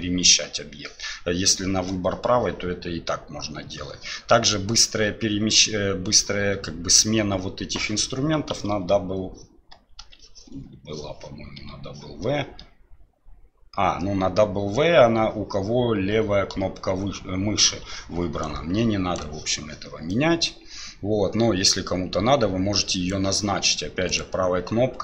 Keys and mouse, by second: 8.6 w, 9.7 w, 10.0 w, 10.5 w, 11.5 w, 12.7 w, 18.4-19.4 right drag, 20.1-23.1 drag, 24.1-25.0 right drag.